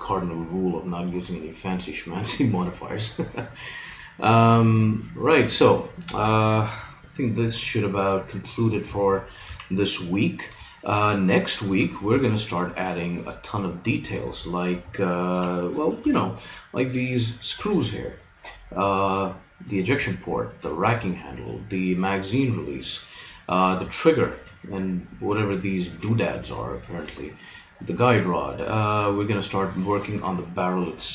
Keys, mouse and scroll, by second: 8.2 middle click, 9.5 z, 13.7-15.3 middle drag, 15.3 KP_3, 16.1 z, 21.3-31.1 middle drag.